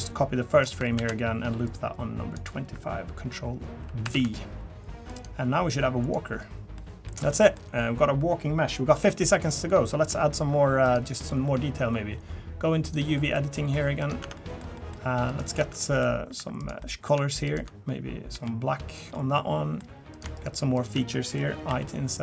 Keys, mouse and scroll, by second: 12.8 click, 13.2 middle click, 13.6 middle click, 14.0 click, 14.2 Tab, 14.3 middle click, 14.7 middle click, 15.3 click, 15.6 Tab, 15.8 middle click, 16.4 3, 16.6 click, 16.8 middle click, 17.5 shift+click, 18.3 g, 19.1 middle click, 20.1 click, 20.3 shift+click, 20.7 click, 21.1 middle click, 21.7 i.